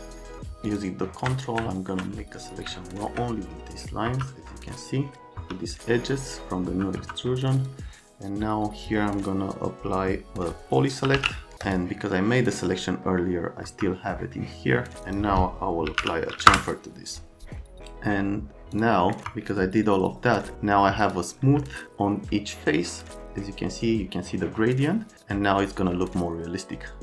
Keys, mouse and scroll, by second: 0.7 ctrl+click, 1.4 middle click, 2.8 alt+middle click, 4.1 F3, 5.4 F3, 10.8-11.6 typing, 11.6 click, 12.2 middle click, 13.7 F3, 15.6-16.5 typing, 16.5 Return, 18.8 click, 19.1 middle click, 19.2 F3, 20.5 middle click, 21.0 click, 21.7 alt+right click, 22.8 right click, 25.1 alt+middle click.